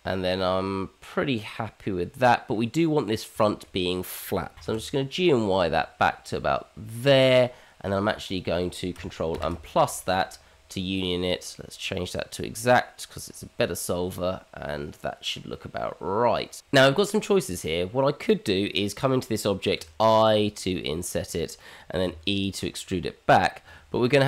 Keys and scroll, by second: 4.5 g, 9.4 ctrl+KP_Add, 16.6 Tab, 19.8 i, 22.1 e.